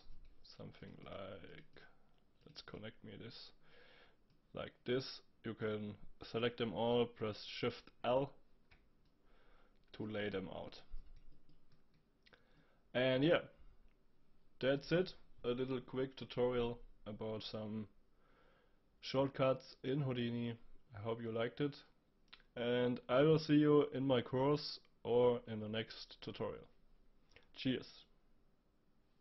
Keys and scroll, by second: 8.0 shift+l.